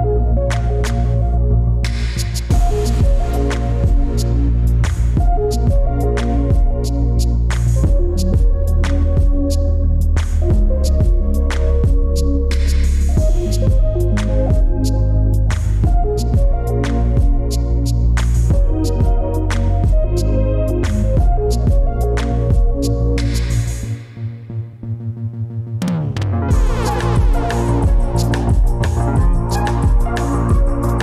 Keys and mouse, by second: 10.4 click, 12.9-16.0 drag, 17.4 ctrl+z, 23.0 Tab, 23.7 Tab, 24.8 ctrl+z, 25.2 ctrl+z, 25.8 click, 26.4 Tab, 26.9 click.